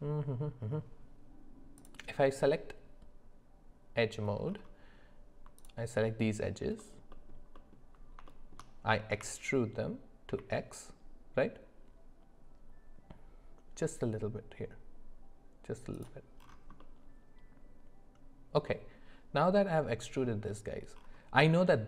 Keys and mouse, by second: 1.8 click, 7.5 alt+middle click, 8.3 shift+middle click, 9.1 e, 16.8-20.0 middle drag.